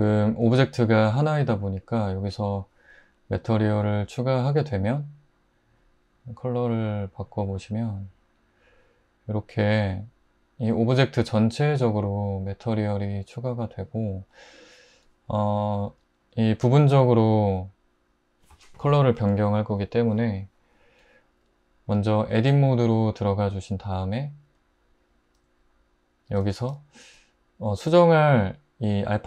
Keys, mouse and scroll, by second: 22.5 Tab.